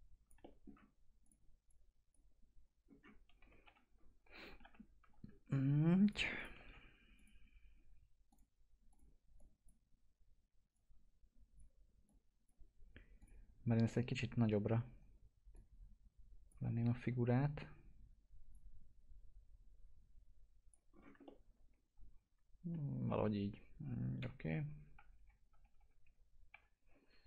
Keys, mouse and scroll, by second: 2.8-3.3 scroll down 1, 3.3-4.8 typing, 4.3 scroll down 1, 6.0 click, 6.5 alt+x, 7.1-12.0 drag, 13.5 scroll up 1, 13.8 alt+middle click, 14.8-15.2 scroll up 1, 15.5 click, 16.7 ctrl+z, 18.8-20.8 drag, 20.8 scroll down 1, 21.2-23.0 alt+middle drag, 23.0 scroll down 1, 23.6-24.1 scroll up 1, 24.1 p.